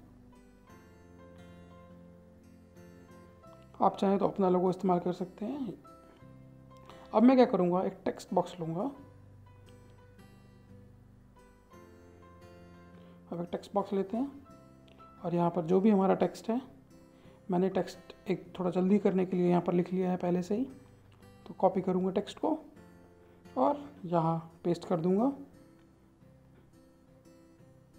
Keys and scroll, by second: 25.0 ctrl+v, 26.4 ctrl+z, 26.9 alt+Tab.